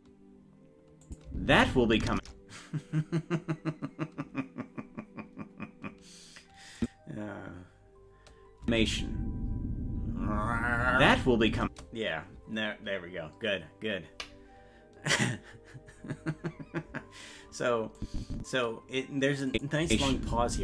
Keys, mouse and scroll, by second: 1.0 click, 1.3 space, 5.3-5.6 scroll up 1, 6.0 scroll up 2, 6.8 click, 8.6 space, 18.0 click, 19.5 click, 19.8 space.